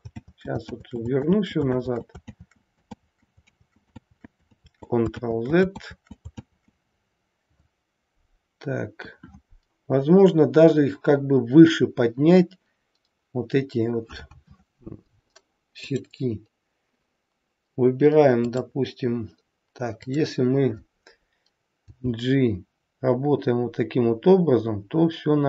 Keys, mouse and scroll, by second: 0.1 ctrl+z, 0.6 ctrl+z, 1.1 ctrl+z, 1.8 ctrl+z, 2.4 ctrl+z, 2.9 ctrl+z, 3.4 ctrl+z, 4.0 ctrl+z, 4.6 ctrl+z, 5.1 ctrl+z, 5.8 ctrl+z, 6.5 ctrl+z, 8.9 KP_1, 15.8 click, 18.3 click, 21.9 g.